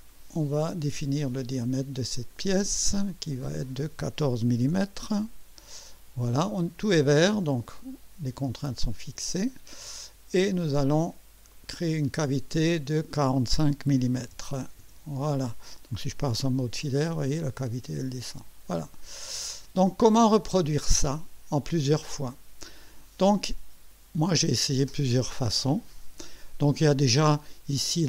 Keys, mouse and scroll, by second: 0.0 click, 2.1 click, 3.4 click, 4.4 1, 4.7 4, 5.0 Return, 9.0 click, 11.5 click, 13.8-14.8 typing, 24.2 click.